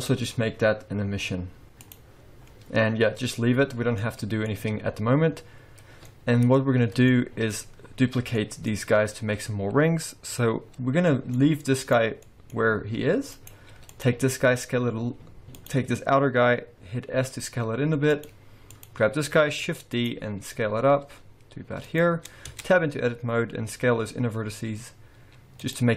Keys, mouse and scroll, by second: 4.0 middle click, 5.9 scroll down 2, 6.1 middle click, 6.7 scroll up 1, 7.1 shift+middle click, 7.6-8.4 scroll up 2, 8.4 middle click, 11.1 middle click, 11.8 click, 12.2 middle click, 13.0 g, 13.9 click, 14.3-14.6 scroll up 1, 14.6 a, 15.6 click, 17.3 s, 18.7 click, 19.6 shift+d, 20.6 s, 22.5 Tab, 23.1-23.7 scroll up 2, 23.7 s.